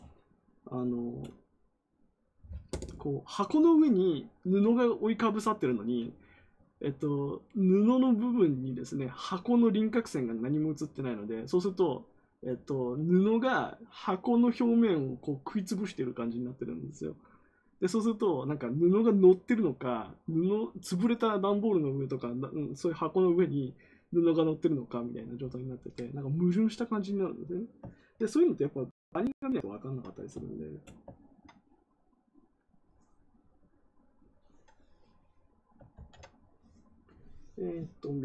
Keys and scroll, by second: 35.9 ctrl+z.